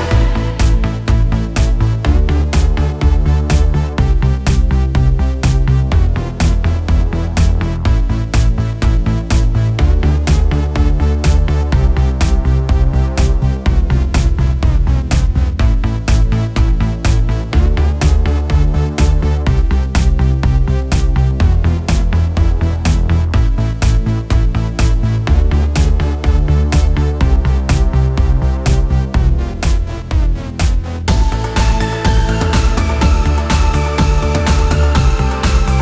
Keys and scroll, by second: 0.1 Return.